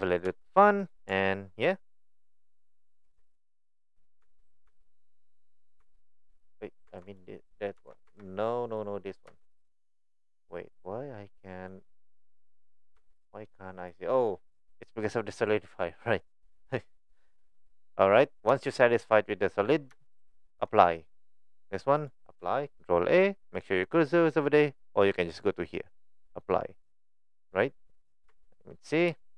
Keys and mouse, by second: 0.0 click, 0.2 Tab, 0.4 middle click, 0.8 click, 1.3 middle click, 2.1 click, 3.0 Tab, 4.3 Tab, 5.8 Tab, 6.5 click, 6.9 Tab, 7.2 click, 7.8 Tab, 8.1 Tab, 8.6 click, 9.3 Tab, 10.2 middle click, 13.0 Tab, 13.3 click, 15.7 click, 18.5 shift+middle click, 18.9 shift+middle drag, 19.4 middle click, 20.7 click, 22.0 click, 25.4-26.5 drag, 27.0 click, 27.5 click, 28.3 Tab, 29.2 shift+middle click.